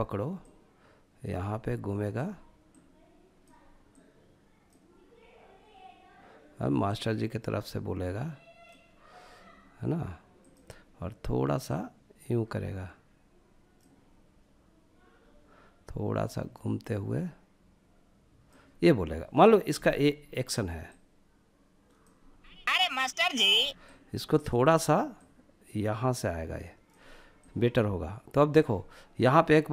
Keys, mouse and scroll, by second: 3.1-9.1 drag, 9.6-14.1 drag, 15.5-18.2 drag, 20.2-21.6 drag, 21.6 space, 22.7 space, 23.1-25.7 drag, 29.3 click.